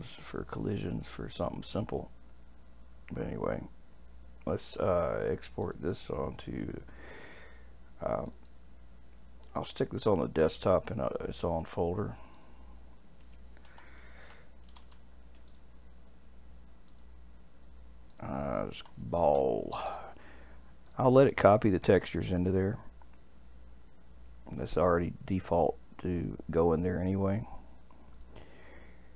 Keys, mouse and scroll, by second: 5.6-8.6 drag.